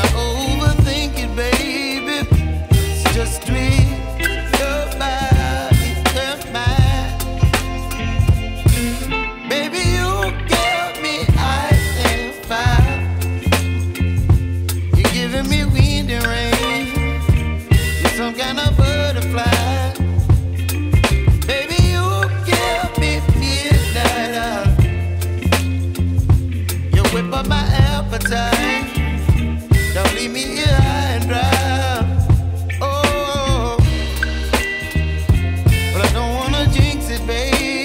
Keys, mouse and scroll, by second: 33.0 right click, 33.1 double click, 34.2-35.3 typing, 34.5 Tab, 35.0 Tab, 35.4 Tab.